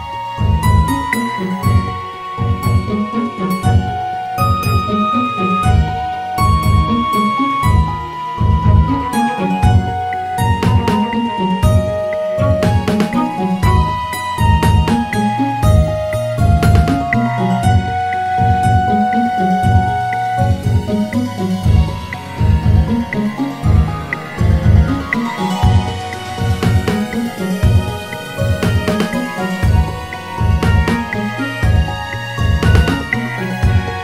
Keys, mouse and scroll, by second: 3.9-6.0 drag, 6.0 ctrl+shift+r, 13.0 click, 14.8 click, 17.6-20.6 drag, 21.2-22.6 drag, 24.9 shift+click, 25.6 shift+click, 26.3 shift+click, 27.4 click, 29.2 shift+click, 30.4 shift+click, 31.3 shift+click, 32.6 shift+click, 33.6 shift+click.